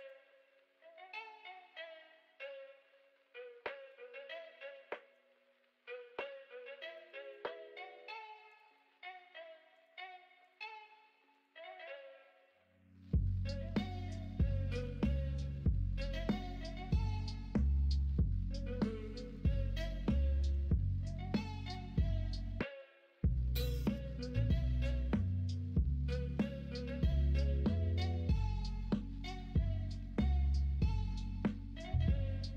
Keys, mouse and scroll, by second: 4.8 middle click, 15.9 middle click, 26.2 middle click, 27.4 alt+z, 30.0 middle click, 31.5 middle click, 31.9 Tab.